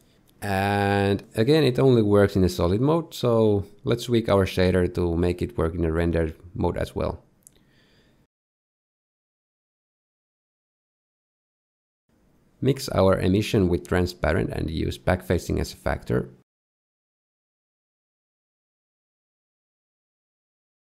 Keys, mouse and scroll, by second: 0.2 shift+middle click, 1.6 middle click, 1.6 z, 4.3 middle click, 5.8 middle click, 6.9 middle click, 9.9 click, 10.5 shift+middle click, 11.0 scroll down 2, 11.3 shift+middle click, 12.8 shift+a, 17.3 ctrl+shift+right click, 18.4 click, 19.1 click, 20.3 click.